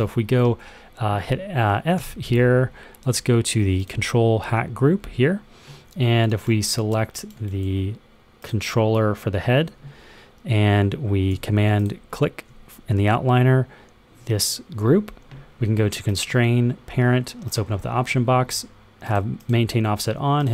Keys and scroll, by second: 1.9 f.